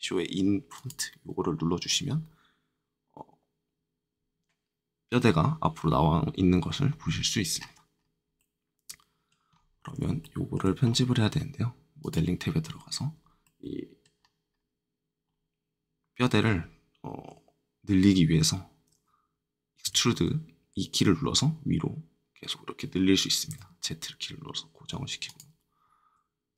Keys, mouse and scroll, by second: 0.7 click, 6.8 scroll up 2, 7.5-7.9 scroll down 2, 8.3-8.8 scroll up 1, 9.5 middle click, 9.5 middle click, 10.2 shift+middle click, 10.5 shift+middle click, 10.8 middle click, 10.8 middle click, 12.0 click, 12.6 middle click, 12.6 middle click, 13.4 middle click, 13.4-14.1 scroll up 1, 14.1-14.5 scroll down 2, 15.2-15.6 scroll up 2, 19.8 e, 23.4 z, 25.2 click.